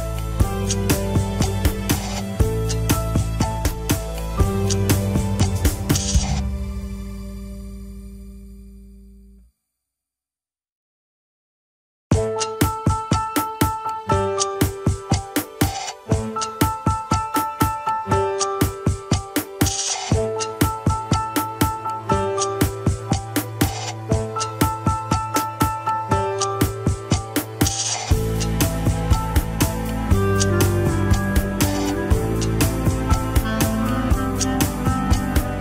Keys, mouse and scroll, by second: 0.1 shift+middle click, 0.5-0.9 scroll down 1, 0.9 shift+click, 1.3 scroll down 1, 1.7 ctrl+Tab, 2.2 KP_3, 2.5-3.1 scroll up 1, 3.1 alt+z, 3.5 alt+z, 4.1 shift+middle click, 4.6 ctrl+Tab, 5.5 drag, 5.9 alt+z, 6.1-6.5 scroll up 2, 6.5 shift+click, 7.6 shift+h, 7.8 click, 8.5 ctrl+Tab, 8.7 click, 9.4-9.8 shift+middle drag, 9.8 shift+scroll down 1, 10.2 g, 11.9-12.3 scroll up 3, 12.3-12.8 shift+middle drag, 12.8-13.2 scroll down 2, 13.2 ctrl+Tab, 13.5 shift+drag, 13.9 ctrl+Tab, 14.9 scroll up 1, 15.2 shift+middle click, 15.4 alt+z, 16.5 ctrl+click, 16.5 alt+z, 18.0 alt+z, 18.7 ctrl+click, 19.9-21.3 drag, 21.3 scroll up 1, 22.5 ctrl+z, 23.1-24.2 drag, 24.2-25.2 middle drag, 25.2 click, 26.2-27.6 middle drag, 27.6 click, 27.8 alt+z, 28.4 click, 28.8 middle click, 29.7-30.0 scroll up 1, 30.0 KP_1, 30.4 ctrl+Tab, 31.0 scroll down 1, 31.5 KP_3, 32.2 click, 32.4-33.2 scroll up 3, 33.2 ctrl+Tab, 33.3 click, 34.4 r.